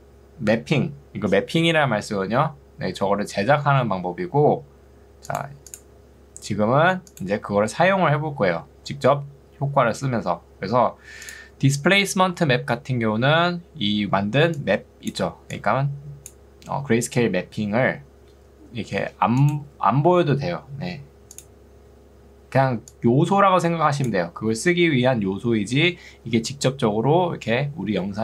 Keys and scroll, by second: 13.3 ctrl+2, 18.9 Escape, 22.7 ctrl+2, 26.3 Escape.